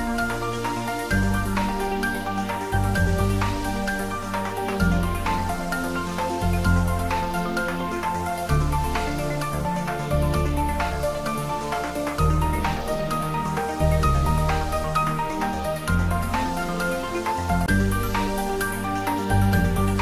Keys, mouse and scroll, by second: 0.9 click, 2.9 shift+click, 5.4-7.2 scroll up 2, 9.2 3, 11.7 click, 13.0 alt+shift+click, 16.8-17.1 alt+shift+scroll up 1, 17.3 scroll down 1, 18.1 shift+d, 18.6 y.